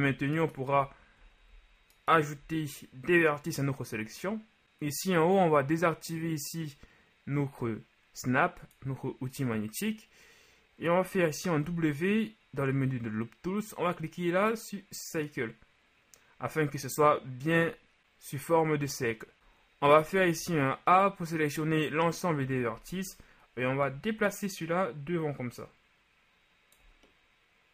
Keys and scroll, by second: 11.7 w, 20.0 a, 20.4 a, 22.4 KP_3.